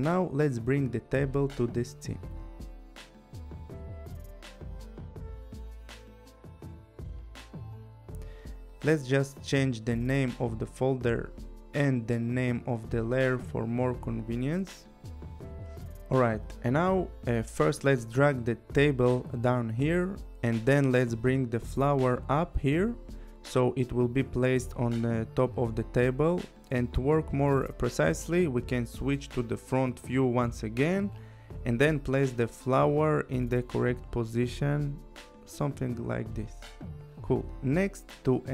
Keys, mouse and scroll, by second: 0.7 click, 1.9 click, 3.8 click, 4.6 click, 10.1 click, 11.4 click, 11.6 Return, 12.0-13.5 typing, 14.2 click, 15.2 click, 15.3 Return, 16.0 shift+t, 16.2 a, 17.2 Return, 19.3 click, 21.7 click, 24.6 click, 26.2 click, 27.6-28.8 scroll, 28.8 click, 28.8 scroll, 33.3 click, 37.7 click.